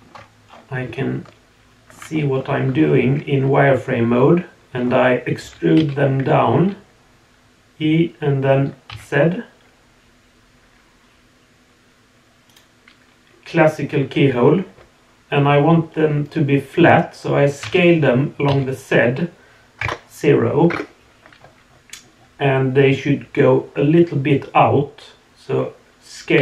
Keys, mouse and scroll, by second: 0.4-1.0 scroll up 2, 1.0 shift+middle click, 2.3 scroll up 1, 2.8 scroll down 2, 3.2 scroll up 1, 4.8 scroll down 2, 5.4 e.